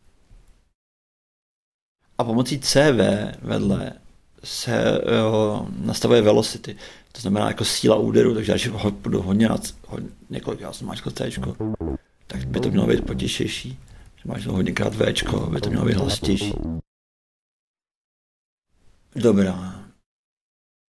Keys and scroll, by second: 0.0-0.1 typing, 1.3 shift+x, 2.4-4.1 typing, 8.4 shift+c, 11.3 shift+a, 13.4 shift+v, 15.1-17.0 typing.